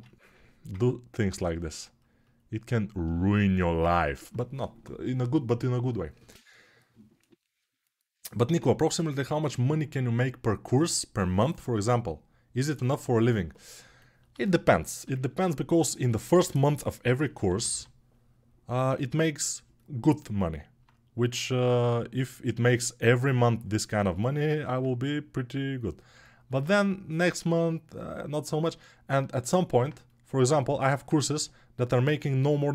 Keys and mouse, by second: 16.4 g, 21.1 3, 29.0-32.7 alt+right drag, 31.1 g.